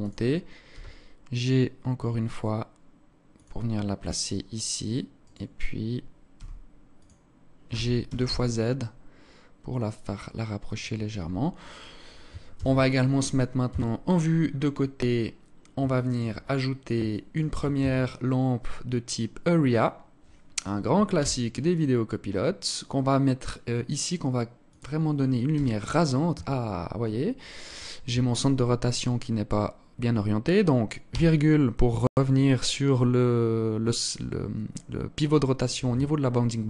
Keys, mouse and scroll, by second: 0.2 g, 4.8 right click, 5.9 g, 7.2 g, 12.1 ctrl+s, 13.2 KP_3, 13.9 scroll down 7, 14.6-15.0 scroll down 2, 15.5 alt+shift+click, 16.0-16.4 scroll down 2, 16.7 alt+shift+click, 17.4 shift+a, 20.8 g, 25.1 r, 30.7 ,, 36.2 r.